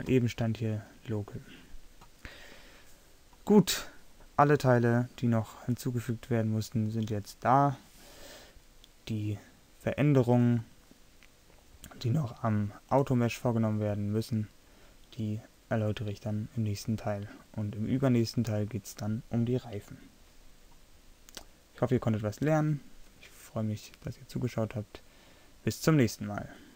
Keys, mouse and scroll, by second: 4.2 middle drag.